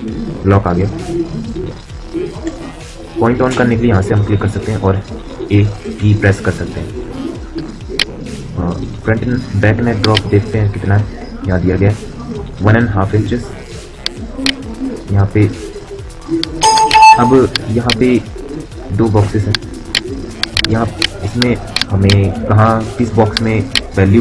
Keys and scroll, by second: 0.0 Return, 5.2 a.